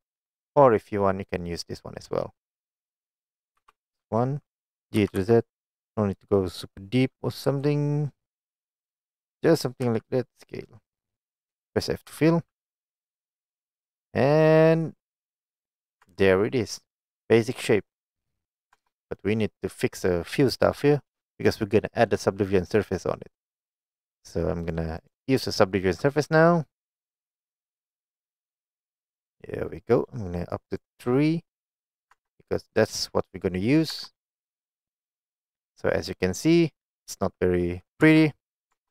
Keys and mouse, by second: 2.6 middle click, 3.7 KP_1, 5.1 g, 5.2 z, 7.5 z, 9.3 click, 9.9 s, 11.0 click, 12.2 f, 12.8 middle click, 15.6 click, 16.1 Tab, 16.3-17.4 middle drag, 18.0 middle drag, 18.8 Tab, 19.3 middle click, 19.8 click, 24.7 click, 25.1 click, 26.3-27.8 drag, 28.9 middle click, 30.5 click, 32.2 Tab, 32.7 middle click, 34.0 Tab, 34.7 middle click, 36.6 click, 37.2 middle click, 38.1 Tab, 38.8 Tab.